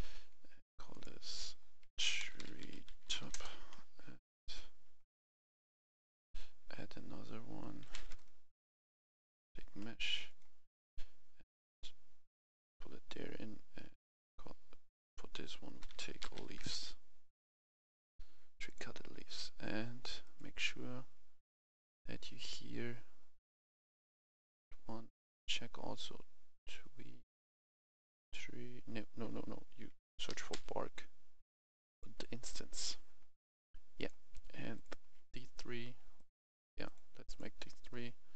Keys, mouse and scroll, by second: 0.9 F2, 2.2-3.7 typing, 4.2 click, 7.8 typing, 9.0 a, 10.2 click, 10.8-11.7 scroll down 1, 11.7-19.6 drag, 15.8-16.5 typing, 30.3 typing, 31.8 click, 34.7 shift+click, 36.2 click, 36.8 shift+click, 37.3 shift+click, 37.9 scroll down 1.